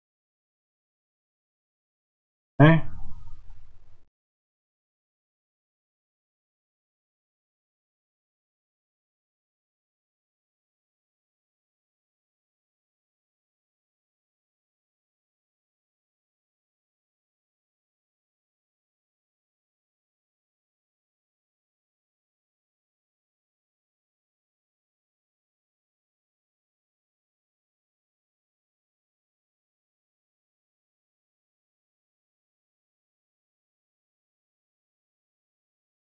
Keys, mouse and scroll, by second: 0.0 shift+click, 0.9 f, 3.4-8.4 middle drag, 8.4 click, 11.7 shift+click, 12.6 f, 13.5 click, 15.6 shift+click, 16.4 f, 17.5 click, 19.4 shift+click, 22.3 shift+click, 23.3 shift+click, 24.1 f, 25.7 click, 27.9 shift+click, 28.6 f, 30.3 click, 31.8 shift+click, 32.8 f, 35.4-36.1 middle drag.